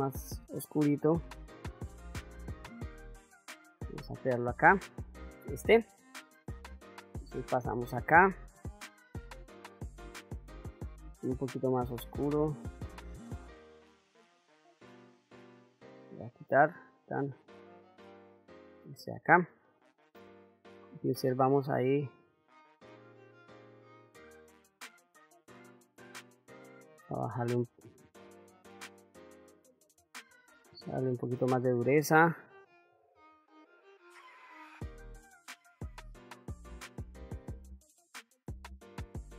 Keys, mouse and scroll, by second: 3.7 click, 6.5 middle click, 7.4 ctrl+middle click, 8.6 middle click, 9.3 shift+middle click, 11.5-14.3 drag, 15.3 click, 16.3 click, 17.7 click, 19.6 middle click, 20.6-25.3 drag, 25.4 middle click, 27.6 middle click, 28.9 click, 30.4-31.7 shift+f, 32.5 f, 33.5-34.8 drag, 35.2 ctrl+shift+middle click, 35.7 click, 36.7 ctrl+middle click, 36.9 ctrl+middle click, 37.1 middle click, 37.3 ctrl+middle click, 37.8 click, 38.6 middle click, 38.8 shift+middle click, 39.2 shift+middle click.